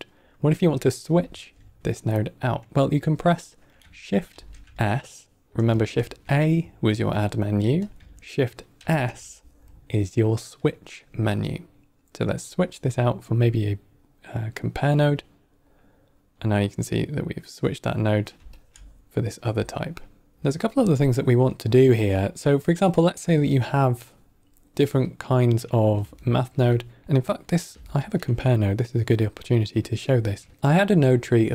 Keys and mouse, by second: 0.5 middle click, 4.2 shift+s, 5.8 shift+a, 7.7 click, 8.7 shift+s, 16.5-17.0 drag, 17.3 click, 18.4 alt+click, 19.7 alt+middle drag, 20.3 alt+right click, 20.6 middle click, 21.4 middle drag, 22.8 middle drag, 25.5 middle click, 26.1 ctrl+middle click, 26.7 middle click, 27.8 ctrl+middle click, 28.3 middle click, 29.9 click, 30.4 shift+d, 30.5 middle click, 30.9 click.